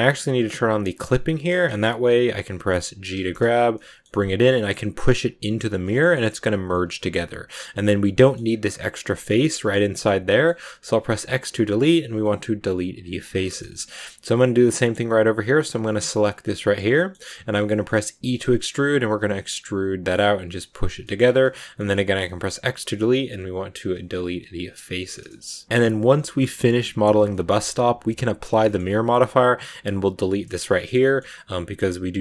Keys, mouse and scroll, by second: 0.8 click, 1.4-3.0 middle drag, 3.0 g, 5.7-7.2 shift+middle drag, 7.2-7.5 scroll up 2, 7.9 middle click, 8.4 scroll up 1, 8.5-10.0 middle drag, 10.0 scroll down 2, 10.1 middle click, 10.5 x, 13.2 scroll down 2, 13.3-16.0 shift+middle drag, 16.0 right click, 16.3 scroll down 2, 16.5 middle click, 17.2 scroll down 1, 17.3-17.6 scroll up 1, 17.6 shift+middle click, 18.1 e, 20.9 shift+middle click, 21.1-21.5 scroll up 2, 21.5 middle click, 21.9 x, 24.6 scroll down 2, 24.9-27.8 shift+middle drag, 27.8-28.5 scroll up 1, 28.5 shift+middle click, 28.8-30.2 scroll up 1, 30.2 shift+middle click, 30.4 scroll down 2, 30.6-32.2 shift+middle drag.